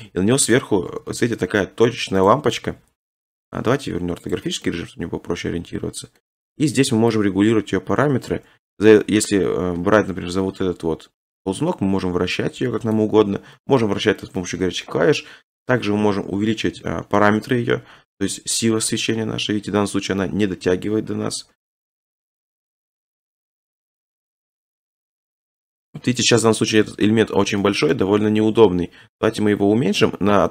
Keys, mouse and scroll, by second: 0.5 click, 0.9 g, 1.1 z, 2.3 click, 2.7 r, 3.6 click, 4.4 click, 6.2 scroll, 8.7-9.4 ctrl+drag, 9.1 ctrl+z, 9.8 1, 13.0 click, 13.3 ctrl+z, 14.4 middle click, 17.2-17.5 scroll, 20.9 click, 21.2 scroll, 21.3-21.8 scroll up 12, 21.8 click, 21.8 g, 22.0 z, 25.0 click, 25.2 scroll, 26.0 shift+middle click, 26.1-27.0 scroll, 27.4 shift+scroll, 28.1 middle click, 28.5 middle click, 29.1 middle click, 29.1 s.